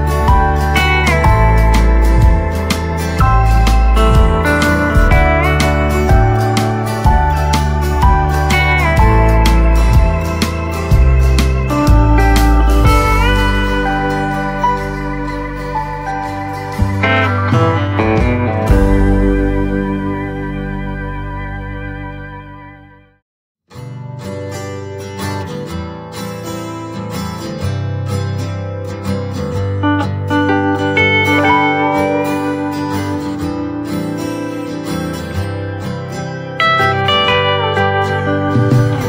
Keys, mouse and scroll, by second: 7.6 right click, 8.4 click, 9.9 shift+click, 10.1 shift+right click, 12.2-17.1 drag, 21.8-22.3 scroll down 1, 22.8-25.0 typing, 28.1-31.6 drag, 31.6 ctrl+c, 32.5 click, 33.0 scroll down 1, 33.4 right click, 34.1-35.4 scroll up 1, 35.4 click, 37.5 ctrl+v, 37.9-38.4 scroll down 1.